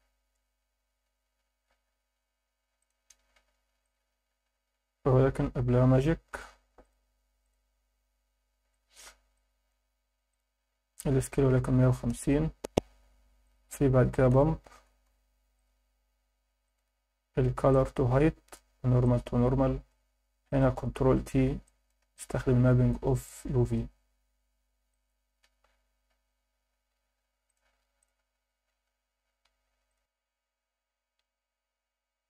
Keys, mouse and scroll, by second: 3.4 shift+a, 7.7 scroll up 2, 8.7 alt+shift+middle click, 9.3 ctrl+alt+middle click, 10.3-12.1 drag, 13.1 shift+a, 17.7-18.6 drag, 19.0-19.9 drag, 20.5 click, 21.1 ctrl+t, 21.6 alt+middle click, 22.1 alt+shift+middle click, 23.2-23.8 drag, 24.4 scroll down 1, 24.9 alt+shift+middle click, 26.1 scroll up 1, 27.5-28.6 drag, 31.1-31.6 scroll down 3, 31.8 scroll up 1.